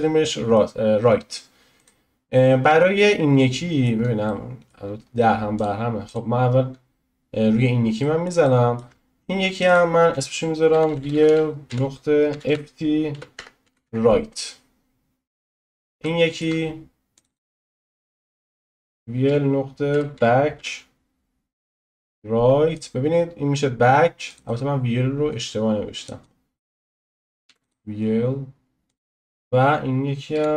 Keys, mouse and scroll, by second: 0.0 middle click, 0.4-1.8 middle drag, 1.8 click, 3.7-5.5 middle drag, 5.5 click, 8.0-9.5 middle drag, 9.5 click, 9.6-11.1 drag, 11.1 e, 15.3 click, 16.0-17.1 shift+middle drag, 17.1-18.7 drag, 18.7 l, 24.2-27.6 drag, 28.8-30.5 drag.